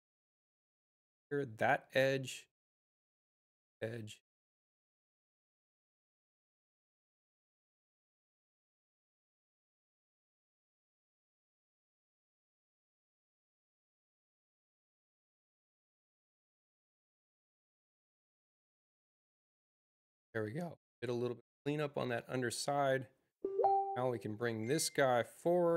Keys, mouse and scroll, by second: 3.0 click, 3.9 click, 6.2 space, 6.7 click, 8.0 u, 11.6-15.5 drag, 23.6 click, 24.6-25.7 drag.